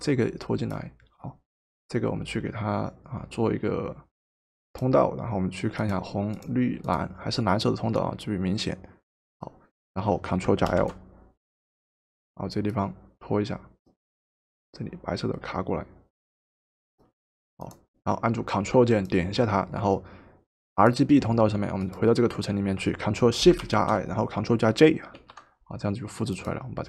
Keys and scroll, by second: 10.6 ctrl+l, 25.1 ctrl+shift+j.